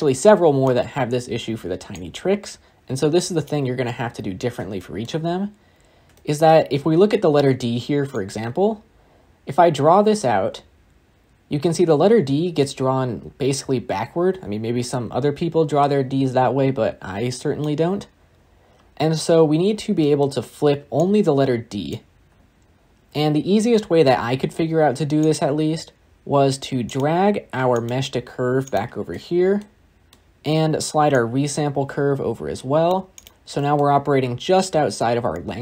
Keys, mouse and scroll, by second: 2.1-3.8 drag, 3.8-4.6 scroll up 4, 4.6-5.4 shift+middle drag, 5.4-6.0 scroll up 3, 6.1-6.4 shift+middle drag, 6.4-7.1 scroll up 1, 8.2-11.1 drag.